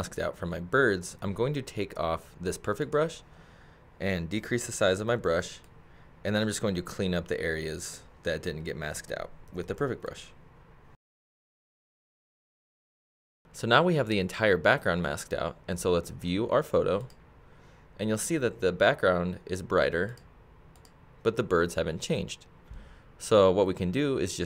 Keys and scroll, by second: 4.4 [, 9.5 ].